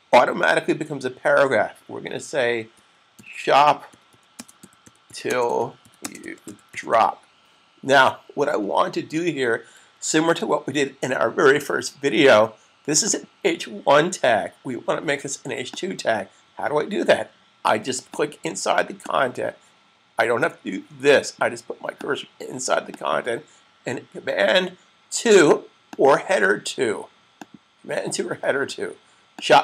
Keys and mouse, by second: 2.7 typing, 4.7-7.3 typing, 10.0 super+s, 17.6-18.3 typing, 26.0 click.